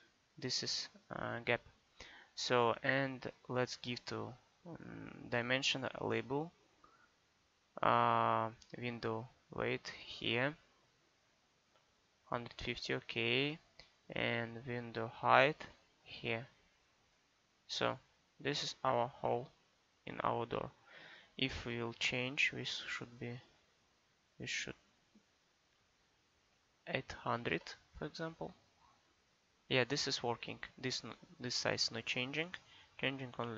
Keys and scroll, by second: 26.5 8, 27.4 0.